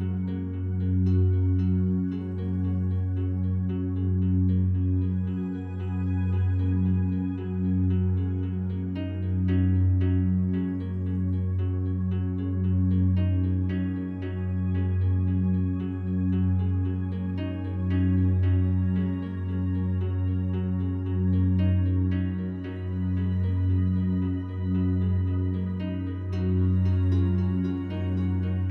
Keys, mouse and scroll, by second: 1.3 click, 2.2-5.0 drag, 4.2 Delete, 5.0 Escape, 5.7-7.0 drag, 7.0 Delete, 7.3-8.3 drag, 8.6-13.6 ctrl+alt+drag, 13.6 s, 14.4 Escape, 15.7-16.9 drag, 16.9 s, 18.5 Escape, 20.0 click, 20.8 click, 21.8 s, 24.6 click, 25.2 ctrl+alt+click, 26.4 g, 26.8 z.